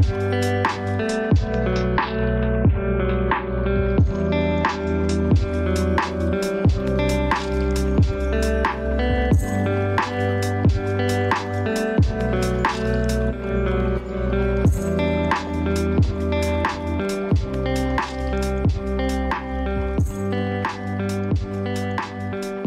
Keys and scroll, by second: 14.7 ctrl+space, 22.0 ctrl+space.